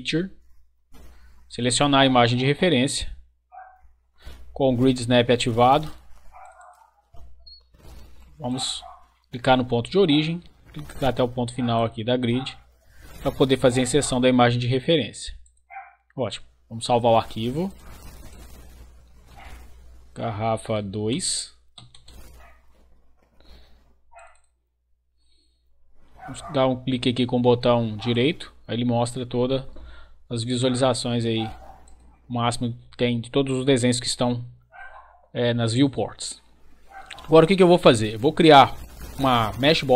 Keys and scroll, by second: 18.9-21.7 typing, 21.9 Return.